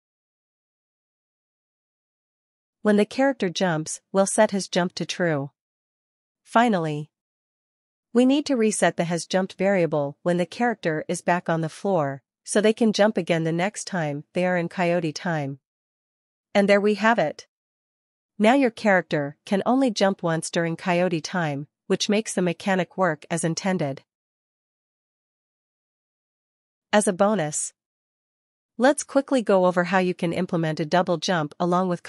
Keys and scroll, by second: 0.0-1.7 typing, 3.2 Return, 3.5-6.4 typing, 8.4 Return, 8.9-12.0 typing, 14.0 ctrl+s, 17.6 Right, 19.3 Up, 20.0 Left, 21.6 Up, 22.3 Right, 23.9 Up.